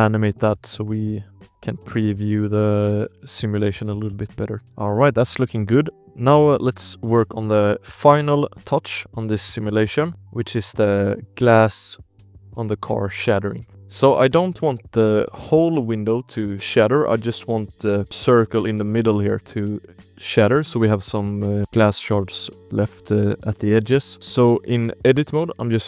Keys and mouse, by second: 0.4 a, 1.0 z, 2.1 click, 3.1-4.7 typing, 8.6 space, 8.9 ctrl+s, 9.4 shift+click, 10.1 alt+a, 10.1 KP_0, 10.1 space, 10.3 space, 13.3 drag, 13.7 Tab, 13.7 alt+a, 13.7 ctrl+s, 13.7 click, 13.7 KP_Decimal, 14.1 shift+click, 14.5 click, 15.0 shift+click, 15.8 click, 18.0 0, 18.4 click, 20.2 click, 20.4 middle click, 20.8 alt+a, 20.9 shift+click, 22.3 click, 22.6 z, 22.8 shift+click, 23.3 l, 23.7 click, 24.6 Tab, 25.0 click, 25.3 alt+a, 25.6 ctrl+s.